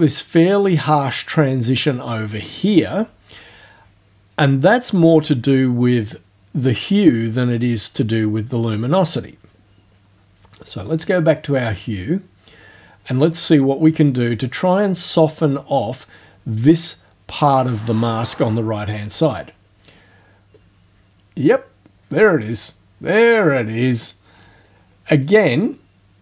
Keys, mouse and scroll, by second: 10.6 click, 20.6-24.7 drag.